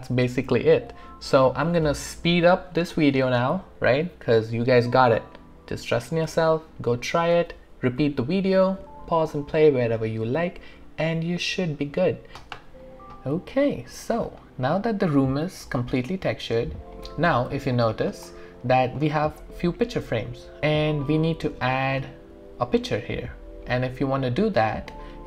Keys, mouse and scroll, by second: 13.3 click, 13.6 alt+click, 14.4 alt+right click, 15.1 alt+middle click, 16.0 alt+right click, 16.3 alt+click, 17.7 alt+right click, 18.8 alt+click, 20.6 alt+right click, 21.3 alt+middle click, 21.7 alt+click.